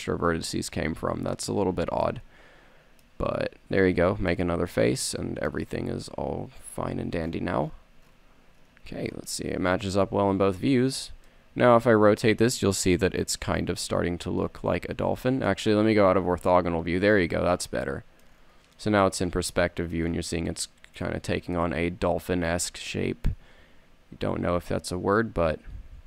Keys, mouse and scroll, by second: 2.3-3.7 middle drag, 3.7 f, 4.1 a, 5.6 middle click, 6.3 KP_3, 7.0 KP_1, 11.0 Tab, 16.1 KP_5, 18.4 middle drag, 24.0-26.0 typing.